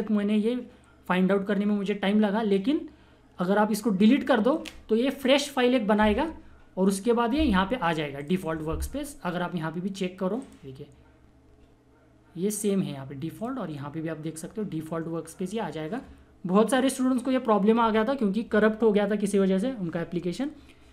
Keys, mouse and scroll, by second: 8.1 click, 13.3 click, 13.4 click.